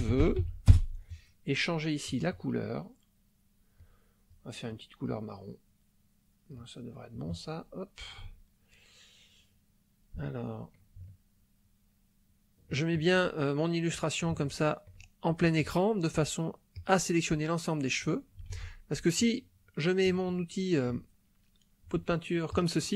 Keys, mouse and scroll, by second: 0.0-0.4 typing, 0.7 Return, 2.1 click, 3.8 click, 4.7-6.7 drag, 10.5 shift+middle click, 11.1-13.2 shift+middle drag, 14.4 shift+middle click, 16.7 click, 18.5 ctrl+z, 19.1 shift+click, 19.7 shift+middle click, 22.5 click.